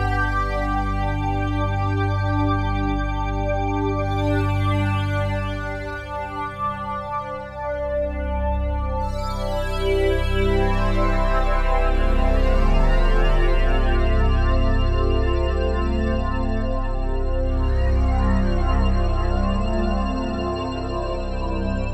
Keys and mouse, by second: 0.0 click, 2.1 click, 5.0-6.6 drag, 8.2 alt+click, 10.3 click, 11.6 alt+click, 12.3 alt+shift+click, 12.8-16.0 alt+shift+drag, 16.2 alt+shift+click, 17.2 ctrl+alt+click, 17.9 ctrl+alt+click, 18.7-21.9 alt+drag.